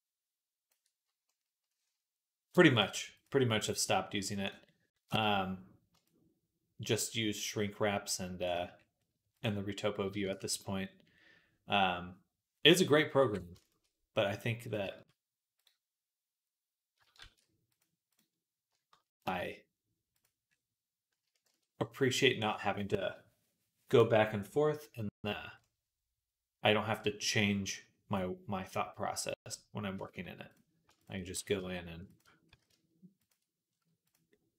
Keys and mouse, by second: 2.7 middle click, 2.7-12.6 right drag, 4.3 click, 4.3 middle click, 5.9-9.3 shift+drag, 5.9-9.3 shift+middle drag, 10.2 ctrl+s, 12.6-15.5 alt+drag, 13.1 alt+h, 15.4 middle click, 15.4-29.8 right drag, 17.0 shift+s, 19.2 shift+s, 21.3 shift+c, 22.2 click, 31.2 s, 32.3 s, 33.5-34.5 right drag.